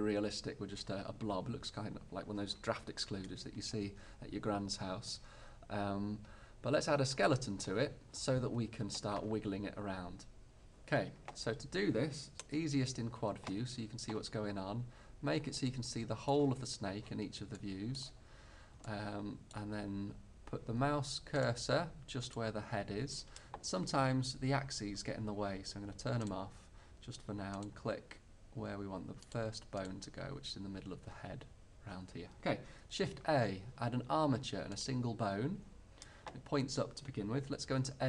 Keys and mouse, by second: 1.2 middle click, 12.9 ctrl+alt+q, 21.5-24.2 drag, 24.2-26.4 middle drag, 26.4-31.8 drag, 33.2 shift+a.